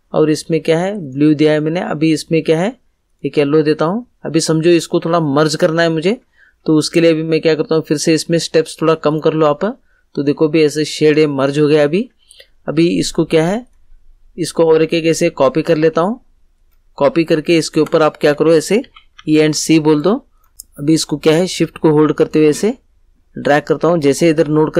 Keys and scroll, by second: 18.8 e, 19.1 c.